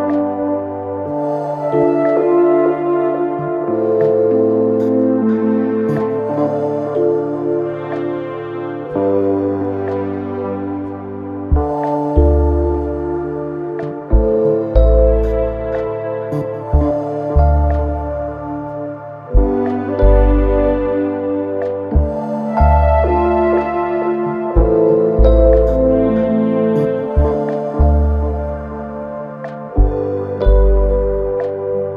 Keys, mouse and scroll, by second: 0.6-1.3 scroll down 2, 1.3 scroll up 1, 1.5 e, 7.9 KP_3, 9.1 click, 10.4 KP_1, 11.0 2, 11.3-11.9 scroll up 1, 11.9 click, 12.4 shift+click, 13.3 f, 14.0 click, 14.4 shift+click, 15.2 f, 16.3 click, 17.0 shift+click, 17.5 f, 18.3 shift+middle click, 19.2 click, 19.9 shift+click, 20.8 f, 21.8 1, 22.1 click, 23.1 click, 24.5 KP_3, 26.2 g, 28.5 click, 28.9 g, 29.9 KP_1, 31.1 click, 31.6 g.